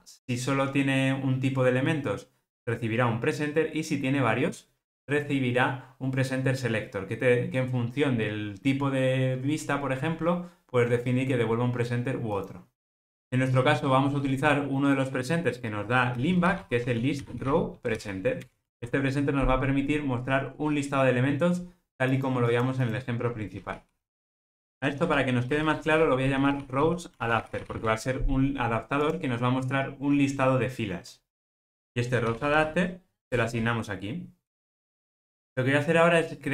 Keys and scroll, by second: 18.5 Return, 23.8 super+p, 25.5 alt+shift+Left, 31.5 alt+shift+Left.